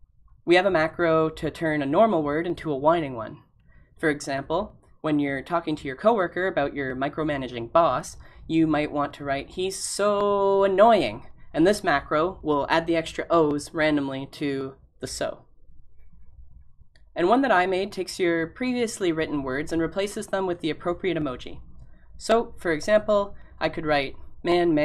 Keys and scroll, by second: 23.6 typing.